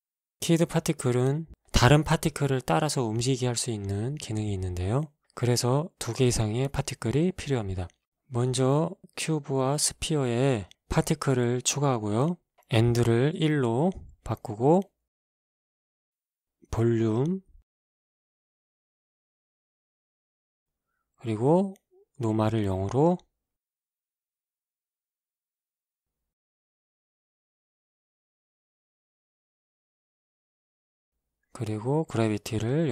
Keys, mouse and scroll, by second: 0.1 middle click, 1.0 right click, 2.3 scroll down 2, 3.4 click, 4.3-6.2 drag, 7.3 z, 8.4 alt+a, 10.8 Escape, 11.6 click, 12.3 KP_1, 12.6 Return, 13.6 alt+a, 14.7 Escape, 17.4 click, 19.5 alt+a, 20.4-21.8 scroll down 2, 22.0 click, 22.7 KP_0, 23.1 Return, 25.2 shift+Left, 25.8 a, 27.4 Escape, 28.0 click, 28.7-30.3 scroll down 2, 30.3 scroll down 1, 31.3 click, 32.6 click.